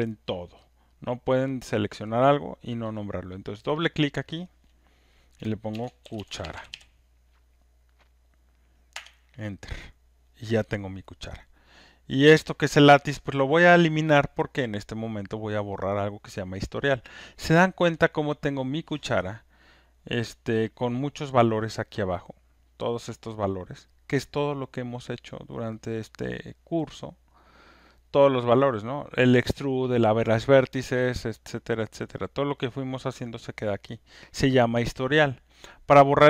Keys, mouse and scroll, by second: 0.7 click, 3.7 click, 3.9 click, 5.5-7.2 typing, 8.9 Return, 22.7-27.9 drag, 28.0-36.2 drag.